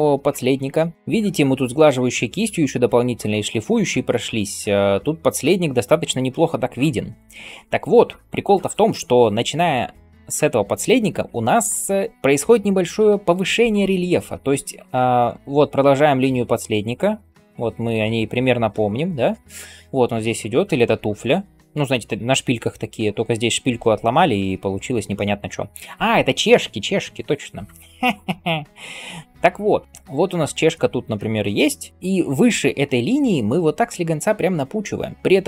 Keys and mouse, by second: 27.8-35.4 ctrl+drag, 27.8-35.4 ctrl+middle drag, 27.8-35.4 ctrl+right drag, 31.9 ].